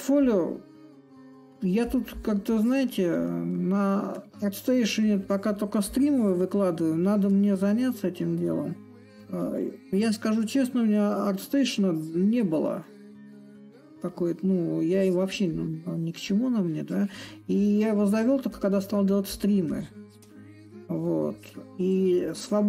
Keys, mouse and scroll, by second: 0.0-5.0 drag, 5.6-10.6 drag, 11.4-16.2 drag, 17.3-22.4 drag, 22.4-22.6 drag.